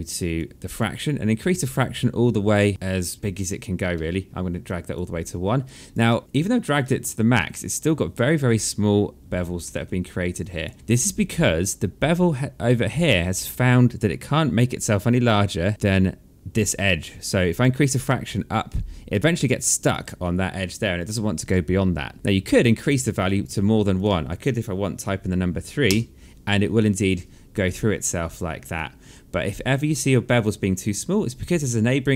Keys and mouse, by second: 0.1 alt+click, 1.7 click, 4.4 alt+click, 5.0 alt+middle click, 5.4 alt+click, 5.8 alt+middle click, 6.6 alt+middle click, 8.4 alt+click, 9.4 alt+middle click, 10.1 alt+click, 10.7 alt+middle click, 12.1 click, 13.9 alt+click, 17.3 click, 21.2 click, 23.4 click, 24.7 KP_3, 25.6 Return, 25.6 KP_Enter, 28.5 alt+click, 31.0 alt+click.